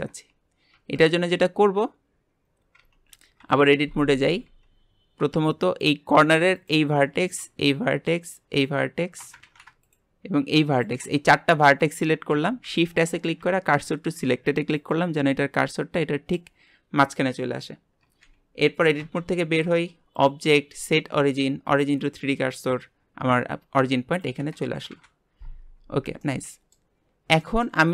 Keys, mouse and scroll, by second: 0.7 Tab, 1.1 scroll up 1, 2.8 Tab, 3.3 KP_Divide, 4.4 Tab, 5.8 click, 7.6 shift+click, 8.5 shift+click, 9.4 ctrl+z, 9.8 shift+click, 10.7 shift+click, 11.1-12.6 middle drag, 12.6 shift+s, 19.1 Tab, 20.1-24.6 drag, 24.9 KP_Divide, 25.6 scroll down 2, 26.2-27.0 middle drag, 27.0 scroll up 2, 27.4-27.9 shift+middle drag.